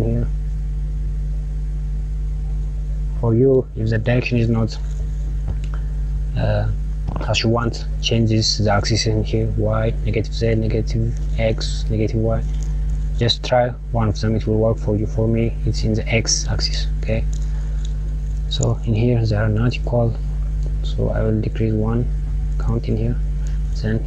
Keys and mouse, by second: 6.3 click, 8.8 click, 9.4 click, 10.0 click, 11.2 click, 14.2 click, 16.6 click, 19.8 click, 22.0-23.3 drag, 23.3 s.